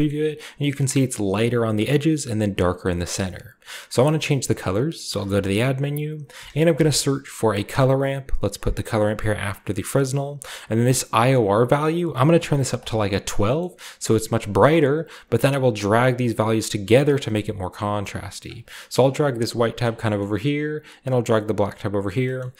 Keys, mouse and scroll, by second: 0.1-1.5 shift+middle drag, 3.1-5.1 middle drag, 3.6-5.1 drag, 5.1 typing, 5.8 click, 6.4-6.9 typing, 7.7 click, 8.9 click, 9.2 click, 9.7 middle click, 9.9-11.7 scroll up 1, 12.2 click, 12.4 typing, 12.8 click, 13.3-14.1 scroll down 1, 14.1-14.6 scroll up 1, 14.8-16.0 scroll up 1, 16.0-17.1 drag, 17.6-18.2 drag, 18.7-21.3 scroll up 1, 22.1-22.5 scroll down 1.